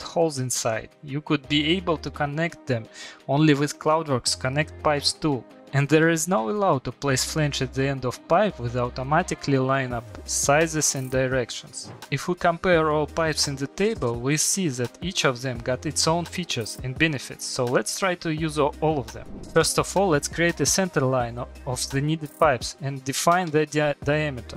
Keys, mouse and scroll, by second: 19.8 click, 20.5 middle click, 21.5 click, 22.5 click, 24.1 middle click.